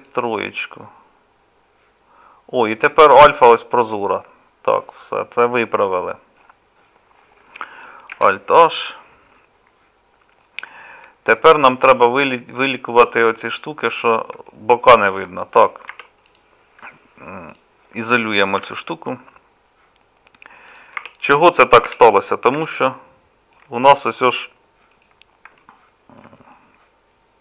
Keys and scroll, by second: 8.1 alt+h.